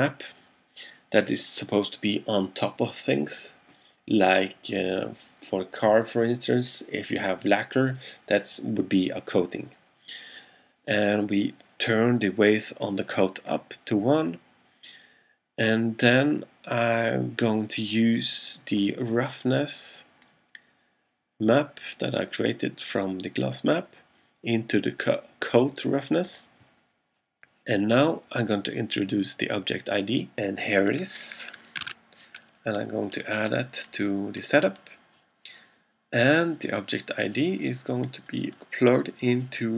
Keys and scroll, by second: 32.0 super+Tab.